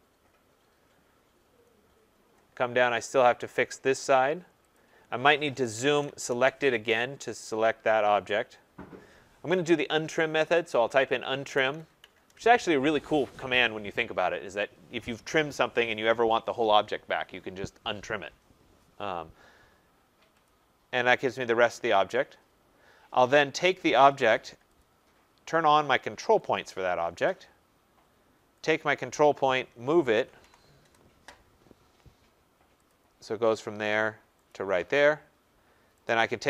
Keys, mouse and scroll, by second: 1.0 scroll, 1.7 middle click, 1.8 middle click, 1.9-4.1 scroll, 4.7 click, 5.7-6.1 typing, 5.8 scroll, 6.9 scroll, 7.5 scroll, 7.9 middle click, 7.9 typing, 8.1 middle click, 9.1-9.4 scroll, 10.0-12.2 typing, 20.4 click, 24.0 Return, 24.7 click, 26.5 click, 28.6 click, 29.7-30.7 typing, 32.9 click, 33.4-34.1 typing, 34.4 click, 36.0 click.